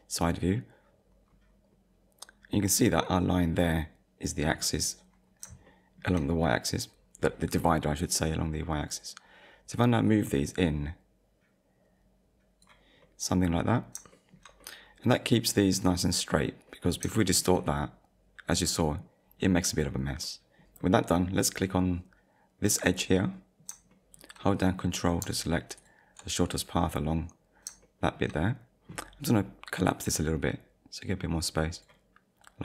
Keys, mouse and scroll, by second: 1.3 scroll up 1, 2.0-2.4 scroll up 1, 5.7 shift+middle click, 10.1 click, 13.0 middle click, 13.6 scroll down 1, 14.1 shift+middle click, 14.6 middle click, 15.9 middle click, 17.2 shift+middle click, 18.8 middle click, 20.2 scroll down 1, 20.3 middle click, 22.7 click, 23.3 middle click, 23.9 shift+middle click, 25.8 ctrl+click, 27.8 shift+middle click, 29.9 click.